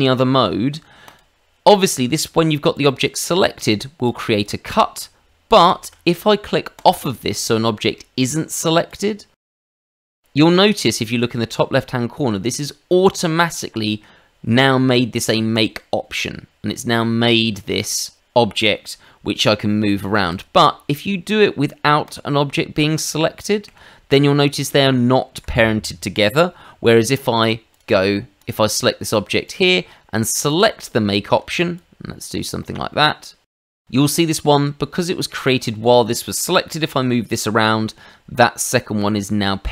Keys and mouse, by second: 1.0 click, 1.7 middle click, 2.7 click, 4.0 click, 4.4 click, 5.6 ctrl+z, 6.7 click, 7.4 shift+middle click, 7.9 middle click, 8.9 click, 15.5 click, 16.1 middle click, 17.5 Tab, 18.5 middle click, 20.3 click, 22.0 click, 23.7 g, 25.3 Escape, 27.7 click, 28.3 click, 29.4 click, 30.4 click, 31.1 shift+middle click, 31.7 click, 32.6 middle click, 33.5 click, 33.8 middle click, 36.7 g.